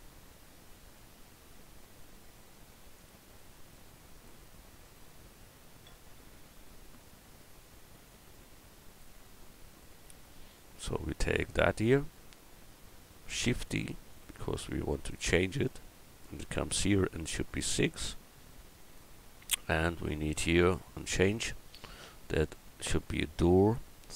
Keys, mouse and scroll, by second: 13.3 shift+d, 15.1-17.2 drag, 18.4-20.2 drag, 21.0 click, 23.2 Tab.